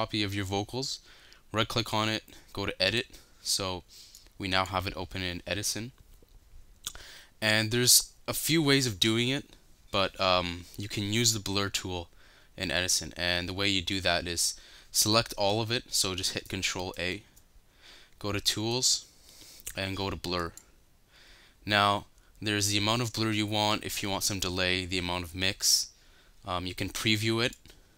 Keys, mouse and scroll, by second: 27.7 right click.